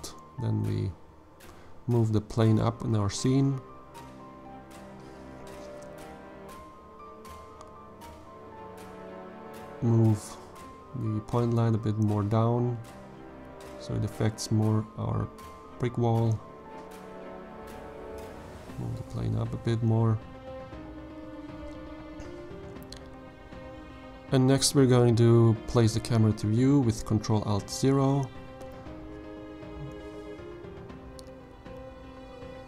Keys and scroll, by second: 8.9 g, 9.3 shift+z, 10.5 g, 10.8 z, 16.2 g, 16.6 z, 26.9 ctrl+alt+0, 31.8 n.